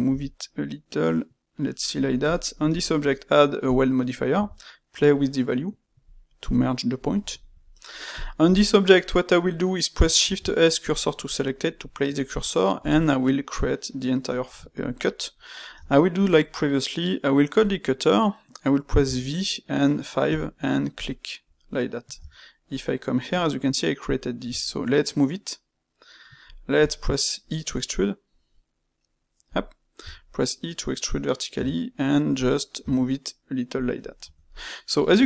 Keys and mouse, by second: 0.0 g, 2.2 click, 2.6 space, 6.4-8.1 middle drag, 8.4 click, 9.0-10.1 middle drag, 10.1 shift+s, 11.3-12.7 middle drag, 12.7 KP_1, 14.3-15.7 ctrl+shift+middle drag, 15.7 space, 21.5 middle click, 22.1 Tab, 24.4 g, 29.9 e, 34.1 Tab, 34.5-35.1 middle drag, 35.1 Tab.